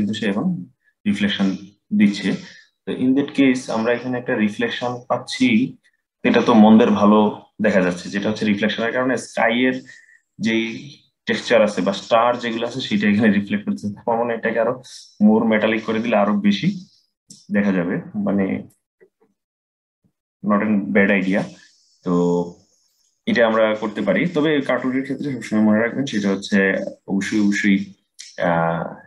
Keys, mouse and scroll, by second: 2.0-3.7 scroll down 7, 3.7-4.7 scroll up 1, 4.7-7.9 scroll up 2, 14.5-17.6 drag.